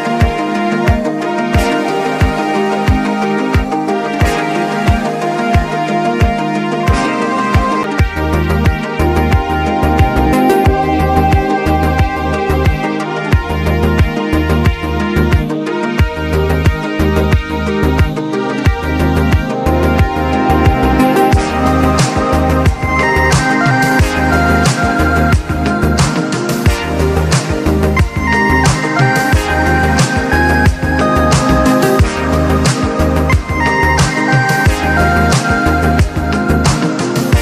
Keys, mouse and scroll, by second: 0.8 alt+scroll down 1, 1.5-7.1 drag, 9.8 click, 12.4 typing, 12.7-17.7 drag, 26.9 click, 30.4 click, 33.6 click, 33.9 click, 36.1 click.